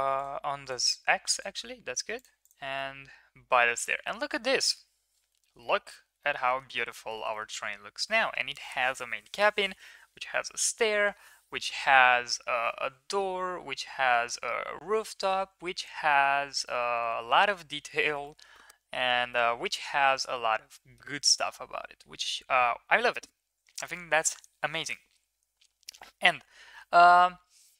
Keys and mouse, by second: 0.1 click, 0.6 drag, 2.7-3.6 middle drag, 4.4 ctrl+s, 5.4 shift+middle click, 5.6 middle click, 6.1 shift+middle drag, 6.4 middle click, 6.7 ctrl+s, 7.1 shift+middle click, 7.3 middle click, 15.8 shift+middle drag, 17.2 ctrl+s, 18.2 middle click, 19.3-20.2 middle drag, 20.7 middle click, 21.2 shift+middle click.